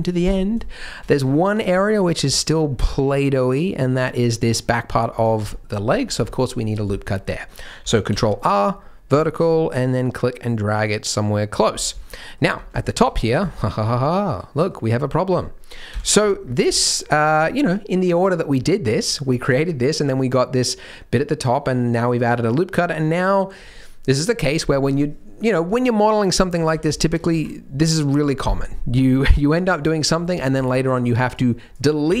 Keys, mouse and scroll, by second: 0.6 shift+middle click, 1.0 middle click, 1.4 scroll up 1, 1.5 Tab, 1.7 middle click, 2.0-2.9 scroll up 3, 2.3 middle click, 2.9 middle click, 4.1 middle click, 4.6 middle click, 4.9-5.3 scroll down 3, 5.1 Tab, 5.5 shift+middle click, 5.9 scroll down 2, 6.2 shift+middle click, 6.6 scroll down 2, 6.9 shift+middle click, 7.1-7.8 scroll up 2, 8.1 ctrl+r, 11.7 scroll up 3, 12.0 shift+middle click, 12.5-13.3 scroll up 3, 12.8 shift+middle click, 13.5 shift+middle click, 14.2 middle click, 15.9 KP_3, 16.4-16.7 scroll up 2, 16.7 shift+middle click, 17.2-18.9 scroll up 1, 18.9 scroll up 1, 19.2-19.7 scroll down 2, 26.6 alt+a, 26.9 shift+middle click, 27.2 z, 30.1 alt+a, 30.5 c.